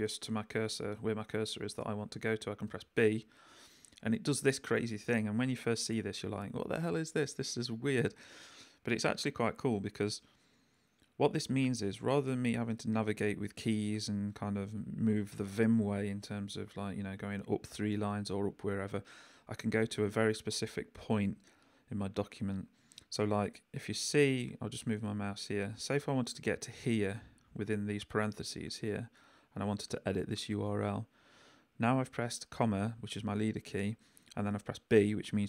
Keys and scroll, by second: 2.7 b.